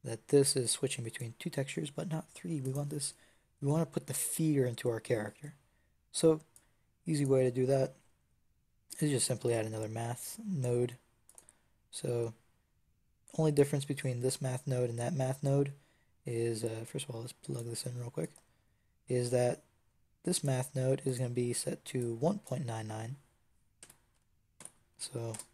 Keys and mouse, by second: 2.5-6.4 drag, 7.2-9.3 drag, 9.3 shift+d, 11.2-12.7 drag, 17.5 click, 18.2-20.3 drag.